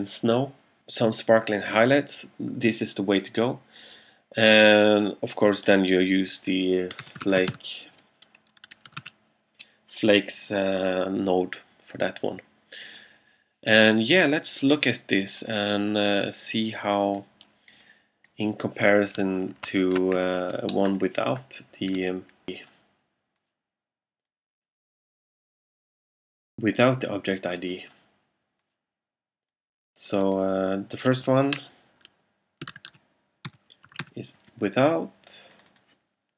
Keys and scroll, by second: 6.9-9.5 typing, 32.5-34.6 typing.